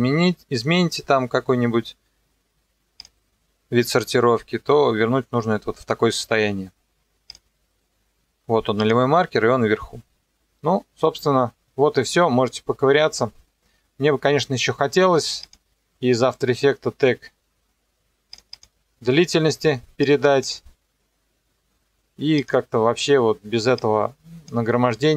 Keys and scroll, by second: 0.0-4.1 typing, 5.4-6.6 typing, 7.5 Scroll_Lock, 7.6 Return, 8.0-8.9 typing.